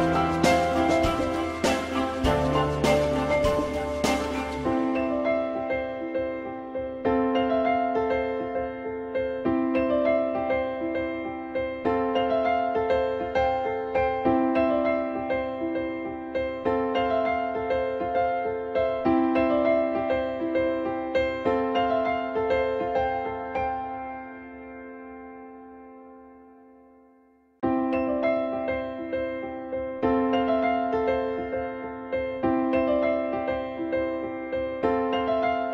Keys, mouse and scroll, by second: 1.1 alt+middle click, 6.5 alt+middle click, 10.5 alt+middle click, 13.7 alt+middle click, 18.3 alt+middle click, 22.1 alt+middle click.